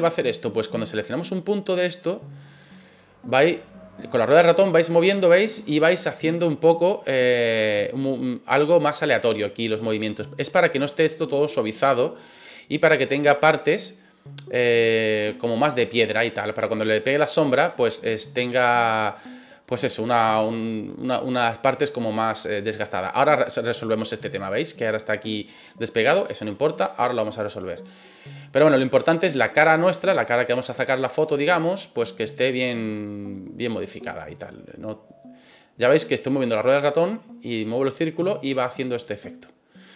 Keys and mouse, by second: 1.2 right click, 1.9-9.7 drag, 10.4 right click, 11.1 click, 13.1 right click, 13.4 middle click, 14.9-15.9 drag, 16.2 middle click, 17.3 right click, 17.8 click, 19.6 right click, 20.3 click, 21.4-22.9 middle drag, 23.8-25.8 middle drag, 26.3 middle click, 27.2 right click, 28.4 middle click, 29.2 middle click, 30.6 right click, 31.4-35.1 drag, 35.1-39.1 middle drag, 39.1 click.